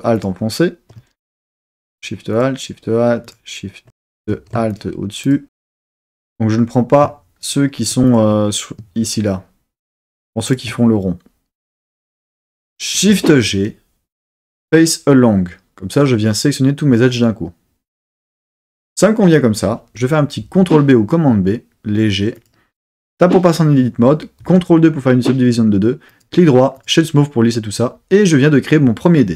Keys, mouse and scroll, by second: 0.1 alt+shift+click, 1.3 super+z, 1.8 alt+shift+click, 2.3 alt+shift+click, 3.2 alt+shift+click, 4.3 super+z, 4.7 alt+shift+click, 5.2 alt+shift+click, 7.4 shift+click, 8.1 alt+shift+click, 10.5 alt+shift+click, 12.9 shift+g, 20.4 super+b, 22.4 click, 23.0 Tab, 24.5 super+2, 26.1-27.2 right drag.